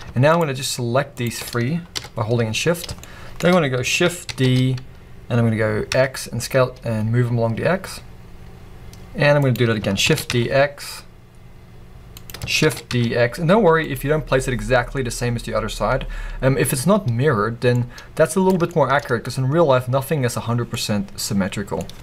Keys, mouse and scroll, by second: 0.3 shift+click, 1.1 shift+click, 1.9 KP_1, 2.6-3.0 scroll down 1, 3.0-9.5 shift+middle drag, 3.5-4.3 scroll down 1, 4.3 shift+d, 9.5 click, 12.2 click, 13.9 click, 15.6 scroll.